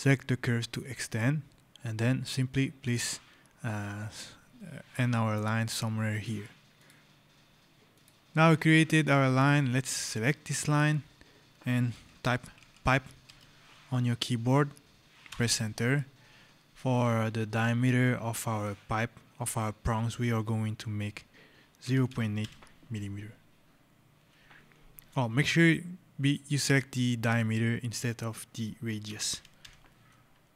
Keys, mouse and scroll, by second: 0.8 click, 6.0 click, 6.9 scroll, 7.8 click, 8.3 scroll, 8.9 right click, 9.6 scroll, 10.6 click, 12.0-13.7 typing, 15.1 Return, 21.6 KP_0, 22.3 KP_8, 26.0 click, 28.9 KP_0, 29.2 KP_Decimal, 29.5 KP_8.